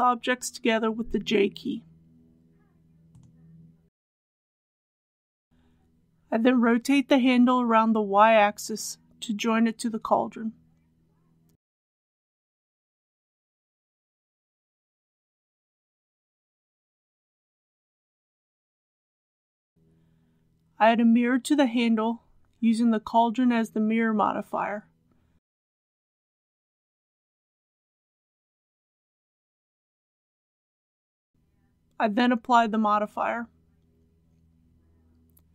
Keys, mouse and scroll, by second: 1.0 shift+click, 2.4 ctrl+j, 4.6 click, 6.1 KP_1, 9.0 r, 9.7 y, 14.4 typing, 16.6 click, 18.1-18.5 scroll down 1, 19.3 shift+middle click, 20.2 click, 32.6 ctrl+a, 33.6 click, 35.1 shift+middle click.